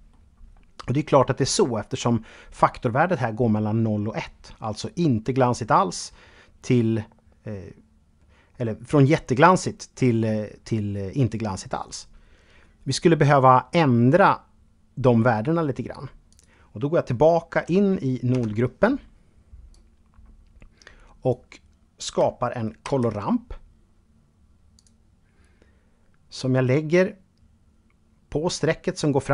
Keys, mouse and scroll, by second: 15.5 click, 17.5 Tab, 18.9-20.7 drag, 22.0 shift+a, 23.9 click.